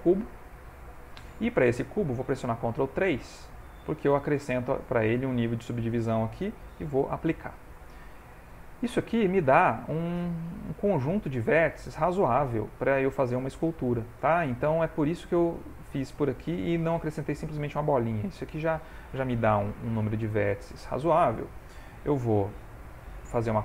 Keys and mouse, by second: 2.4 ctrl+3, 3.3 middle click, 7.2 ctrl+a, 8.0 middle click, 10.2 Tab, 10.6 middle click, 15.8 click, 16.9 ctrl+middle click, 17.3 shift+middle click, 18.4 Tab, 20.2 shift+middle click, 23.4 shift+d.